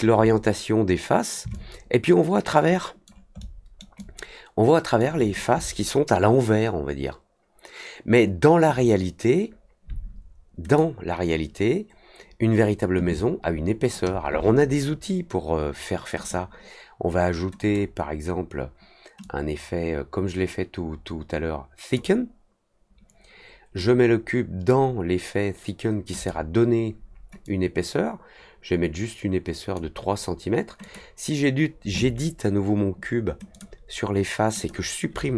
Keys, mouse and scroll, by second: 1.5-3.0 alt+drag, 3.3 alt+middle click, 3.9-4.9 alt+drag, 10.6 click, 16.1 click, 17.5 click, 19.2-21.9 drag, 23.7 click, 26.1 click, 27.4 click, 30.8 click, 33.5 click, 34.5 click.